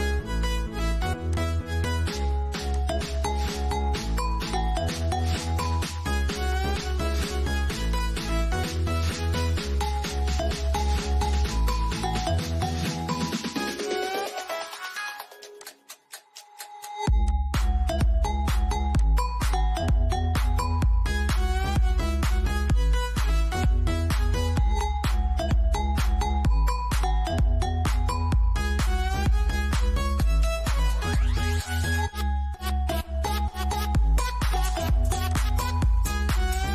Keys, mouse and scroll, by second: 0.8 click, 4.5 click, 8.6 space, 9.5 Return, 10.9 click, 34.8 click, 36.5 scroll up 1.